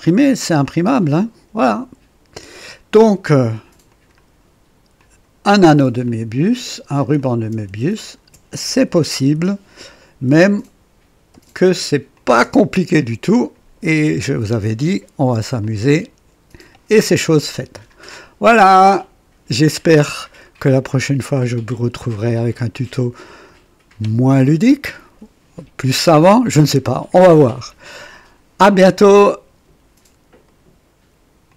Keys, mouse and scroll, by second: 0.6-2.8 drag, 3.9 click, 5.0 click, 6.1 click, 7.2 click, 8.0 ctrl+click, 9.2 Delete, 10.5 click, 11.3 space, 11.4 space, 12.2 click, 12.4 space, 13.3 click, 13.9 click, 14.8 right click, 15.6-16.9 drag, 17.9 scroll down 1, 18.8-20.1 drag, 20.4-21.0 right drag, 21.1-22.6 drag, 23.5 right click, 30.5 right click, 31.5 click.